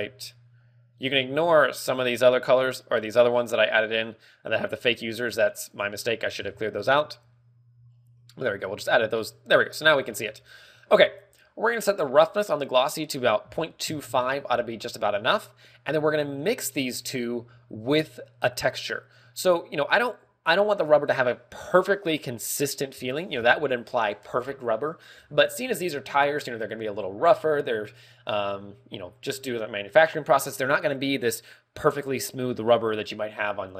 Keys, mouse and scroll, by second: 13.3 ctrl+click, 14.8 ctrl+click, 15.7 scroll down 3, 15.9 middle click, 16.8 click.